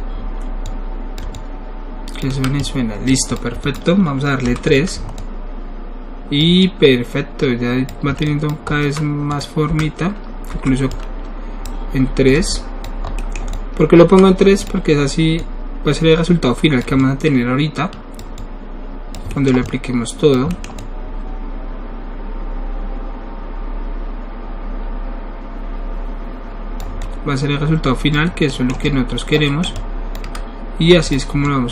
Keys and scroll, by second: 9.7 1, 11.6 3.